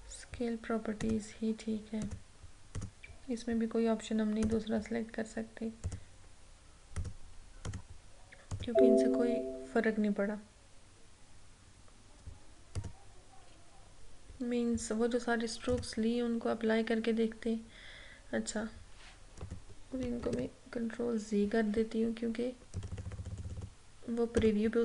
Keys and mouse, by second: 1.1 click, 12.9 click, 15.8 click, 19.5 click, 20.3 ctrl+z, 22.8 click.